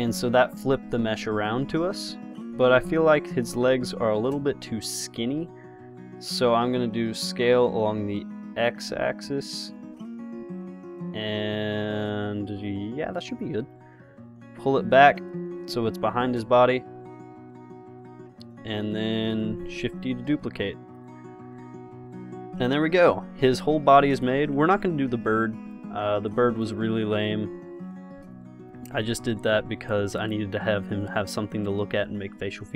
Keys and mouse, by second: 4.6 s, 14.8-16.2 drag, 16.2 KP_0, 17.8 r, 19.6 shift+d, 21.8-22.8 drag, 25.2 g, 26.3 x, 27.5-28.6 middle drag, 28.6 middle click, 30.0 g, 32.0 s.